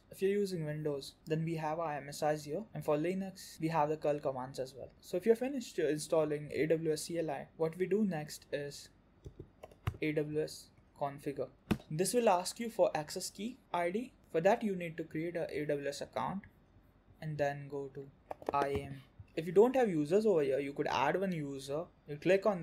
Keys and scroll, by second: 14.2 alt+q.